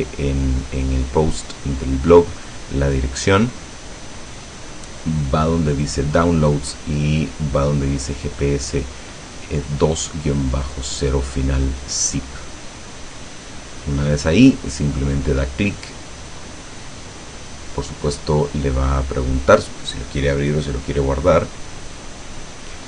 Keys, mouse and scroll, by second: 3.5 scroll down 1, 5.5 scroll down 2, 11.4 click, 16.0 click.